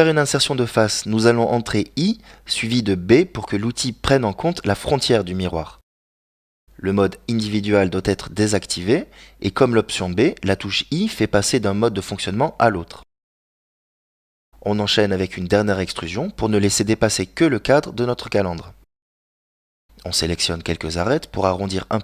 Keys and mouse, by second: 0.9 ctrl+right click, 1.7 g, 14.5 e, 18.7 middle click, 20.9 click.